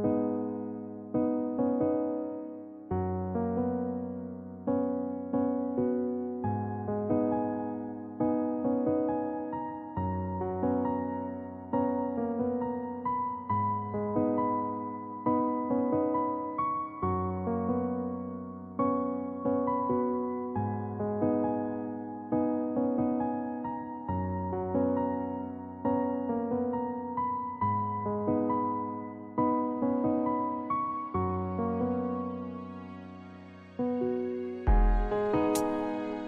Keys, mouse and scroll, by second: 2.2 Tab, 3.0 Tab, 11.1 shift+Left, 13.4 alt+a, 30.3 alt+a.